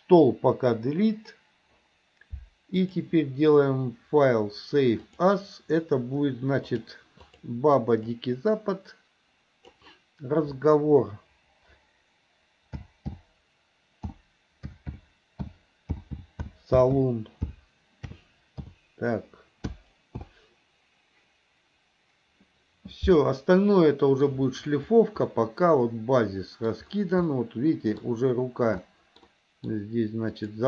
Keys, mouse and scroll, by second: 0.6 Delete, 2.8-5.6 drag, 23.5-24.3 middle drag, 25.5-26.9 middle drag, 27.5-28.3 middle drag, 29.1 middle click, 30.5 click.